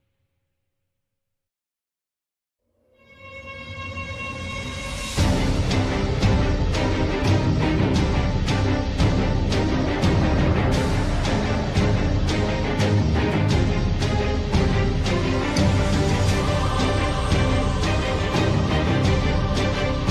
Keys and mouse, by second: 0.4 middle click, 2.2 KP_7, 2.6 z, 4.7-6.1 shift+drag, 7.3 s, 10.7 z, 11.5 middle click, 14.4 shift+middle click, 15.0-16.3 middle drag, 17.5 KP_3.